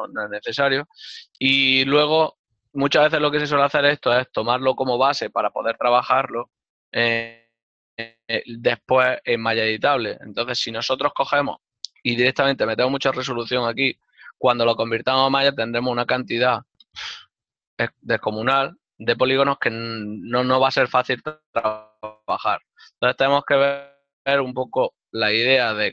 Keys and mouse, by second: 25.6 click.